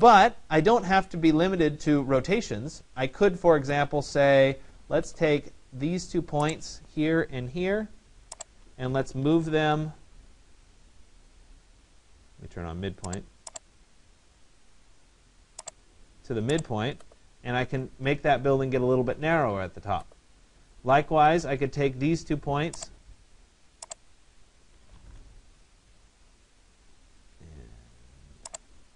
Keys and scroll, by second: 9.2 Return, 24.7 Return.